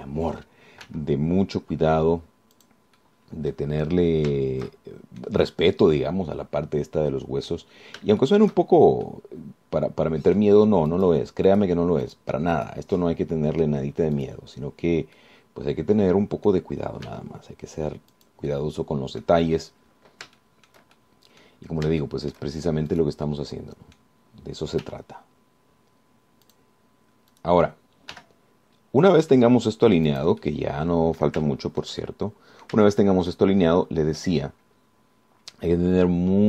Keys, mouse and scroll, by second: 0.2 shift+click, 2.0 g, 3.8 click, 4.2 click, 4.8 scroll down 1, 5.9 shift+click, 7.0-8.9 drag, 9.0-9.4 scroll up 3, 9.4 shift+click, 10.2-11.8 middle drag, 12.1 click, 12.7 click, 13.2 click, 13.8 click, 14.2 middle click, 15.4 click, 16.4-17.9 drag, 18.3 g, 19.4 click, 19.7 click, 20.8 scroll down 1, 21.6 shift+click, 22.2 shift+click, 23.1 shift+scroll up 2, 23.2 shift+click, 24.5 click, 25.2 scroll up 2, 26.0 g, 27.7 click, 28.6 click, 29.4 g, 31.3-32.6 drag, 33.6 click, 34.1-35.6 shift+drag, 35.8-36.4 scroll down 4.